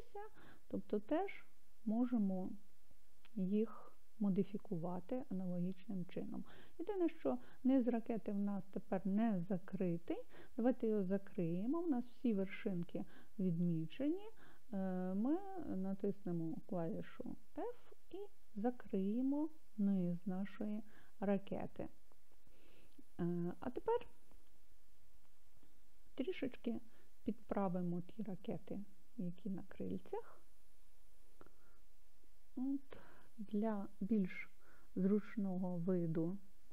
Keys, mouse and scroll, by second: 1.2-10.4 middle drag, 17.5 f, 20.2-23.4 middle drag, 31.0 KP_1.